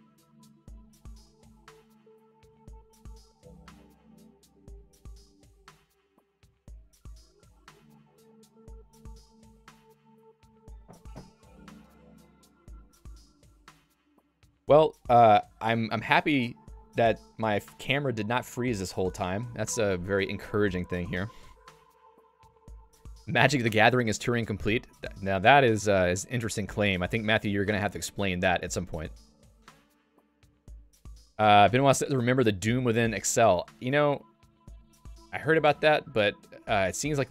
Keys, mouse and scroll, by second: 13.3 Escape, 13.8 click.